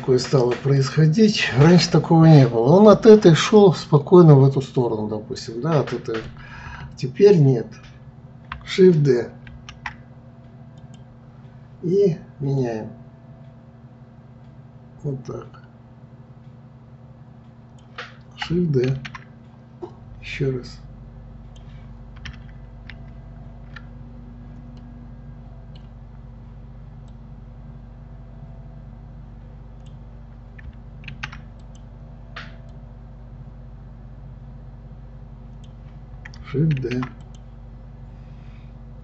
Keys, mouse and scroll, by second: 0.8 click, 4.8-7.8 middle drag, 9.5 shift+d, 12.6-15.6 drag, 18.9 shift+d, 23.1 ctrl+z, 24.8-27.1 middle drag, 27.1-30.1 drag, 31.1 shift+d, 32.7-35.7 drag, 36.8 shift+d.